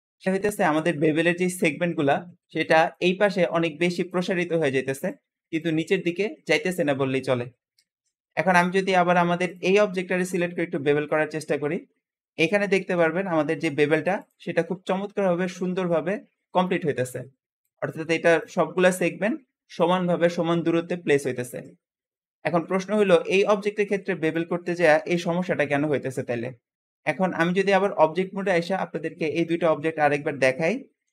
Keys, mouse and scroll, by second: 7.6 Escape, 9.3 click, 9.7 Tab, 10.0 click, 10.7-11.2 shift+middle drag, 11.2-11.6 scroll up 1, 11.6 Tab, 12.7 ctrl+b, 15.1 middle click, 15.8-16.6 scroll up 2, 16.6 `, 16.8 scroll up 1, 21.3 Escape, 21.4 Escape, 21.6 scroll down 4, 22.0 shift+middle click, 22.6 Tab, 22.6 Tab, 22.8 click, 23.4 Tab, 23.5 Tab, 24.1 click, 24.9 ctrl+b, 27.3 Tab, 27.4 Tab, 27.7-28.1 scroll down 1, 28.1-29.0 shift+middle drag, 29.0 ctrl+z, 29.3 ctrl+z, 29.5 ctrl+z, 29.8 ctrl+z, 30.1 ctrl+z, 30.4 ctrl+z, 30.8 ctrl+z.